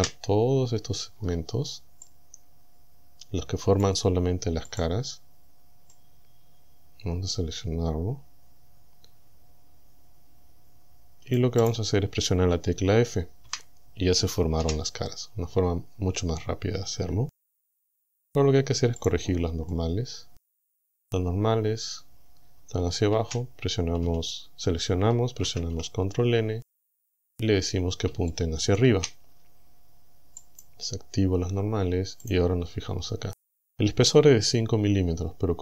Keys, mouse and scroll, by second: 0.0 c, 0.8-1.1 scroll up 2, 1.1-1.4 scroll down 2, 2.1-4.0 drag, 4.7 click, 6.0-11.6 drag, 11.6 right click, 13.5 f, 14.6 a, 15.5 scroll down 2, 19.0 click, 19.7-21.2 middle drag, 23.2 a, 25.5 ctrl+n, 27.1 click, 28.3 shift+middle click, 28.9 shift+scroll up 2, 30.4 click, 32.3 click, 33.0-33.6 scroll down 2.